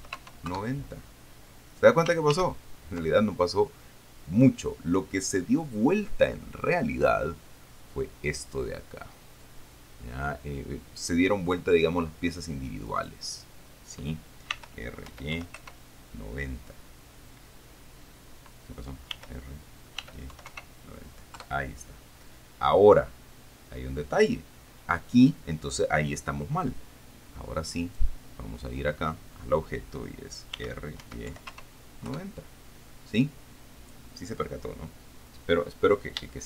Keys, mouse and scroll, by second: 0.2 KP_9, 0.4 KP_0, 0.7 KP_Enter, 2.6 ctrl+z, 13.2 right click, 14.8 r, 15.3 y, 15.6 KP_9, 15.8 KP_0, 19.4 r, 20.3 y, 20.6 9, 20.7 KP_0, 21.6 KP_Enter, 28.1 right click, 30.8 r, 31.3 y, 31.6 KP_9, 31.8 KP_0, 32.5 KP_Enter.